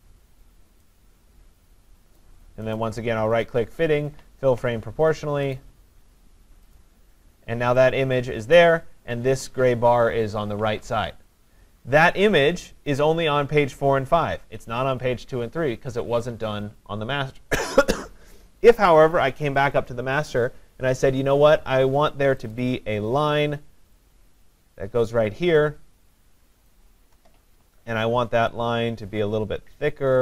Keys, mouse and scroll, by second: 2.2 click, 2.8 right click, 5.6 click, 6.8 click, 8.1 click, 8.1-8.5 click, 8.6 click, 19.6 click, 19.9 click, 22.5 click, 25.9 click, 26.7 shift+click.